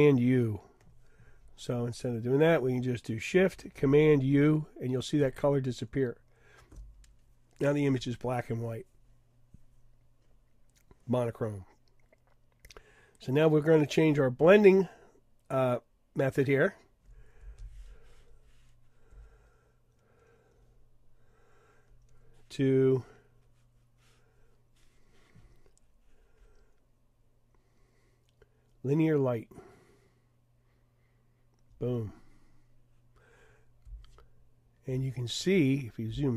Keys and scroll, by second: 5.2 shift+super+u.